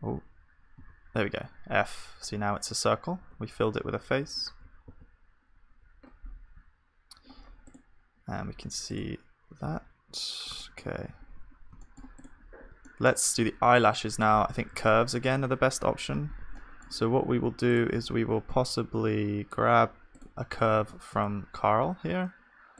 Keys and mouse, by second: 0.8 f, 2.3-5.1 middle drag, 3.3 Tab, 4.2 KP_1, 4.9 ctrl+s, 5.5 z, 7.4 middle click, 7.7 click, 9.1 z, 11.1 z, 14.7 shift+a, 18.5 click, 18.5 right click, 18.5 z, 18.6-20.8 middle drag, 20.8-22.2 drag, 20.8 shift+d.